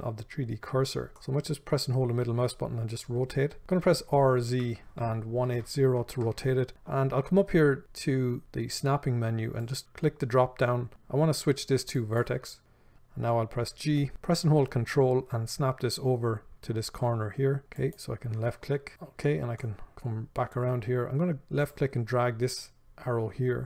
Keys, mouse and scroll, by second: 1.4-6.7 middle drag, 4.0 r, 6.7 right click, 9.8-18.2 drag, 13.9 g, 18.9-23.6 shift+middle drag.